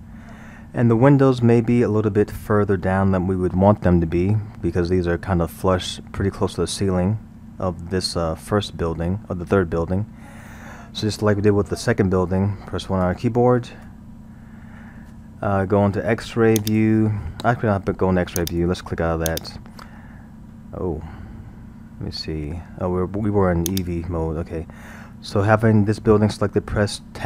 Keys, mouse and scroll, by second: 13.8 KP_1, 16.6 click, 18.4 click, 19.3 click, 23.7 click.